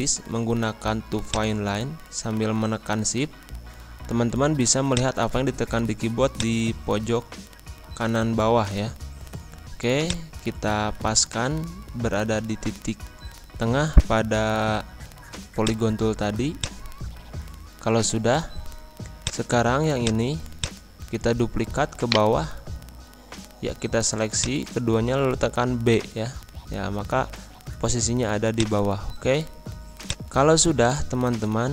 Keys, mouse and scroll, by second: 3.7 scroll up 1, 4.8-9.0 drag, 9.0-10.0 scroll up 1, 10.0-12.2 drag, 12.2 scroll up 1, 13.1 scroll down 1, 15.5-22.0 drag, 22.0 shift+right click, 22.7-23.7 scroll up 1, 24.3 shift+click, 26.0 b, 26.7 scroll down 1, 28.2 z, 28.8-30.0 drag, 30.3-31.7 drag.